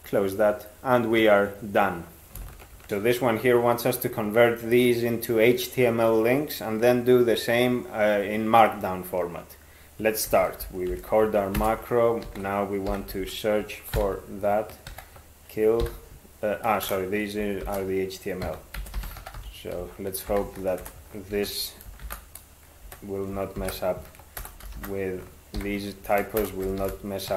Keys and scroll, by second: 10.3 ctrl+x, 10.9 (, 11.6 ctrl+space, 12.3 ctrl+s, 12.7-13.7 typing, 14.0 alt+b, 14.9 ctrl+w, 15.8 [, 17.1-20.3 typing, 20.8 Delete, 21.4 ctrl+e, 22.0-27.3 typing, 25.6 ctrl+y.